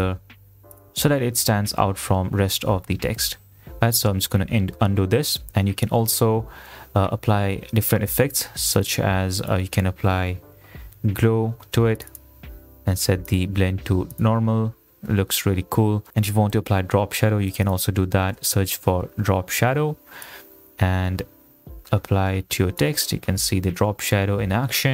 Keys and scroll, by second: 4.7 ctrl+z, 6.6 ctrl+shift+z, 10.0-11.1 typing, 16.7 Delete, 18.0-19.5 typing.